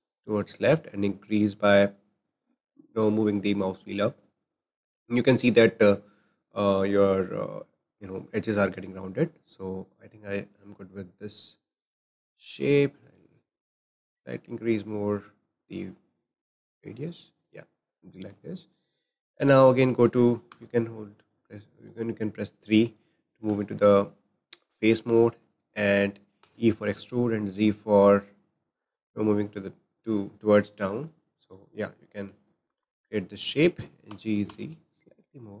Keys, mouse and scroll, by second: 18.5 shift+middle click, 19.5 click, 20.5 3, 22.5 click, 23.7-26.4 shift+middle drag, 26.4 e, 31.8 scroll down 5, 32.6-34.1 shift+middle drag, 34.1 g.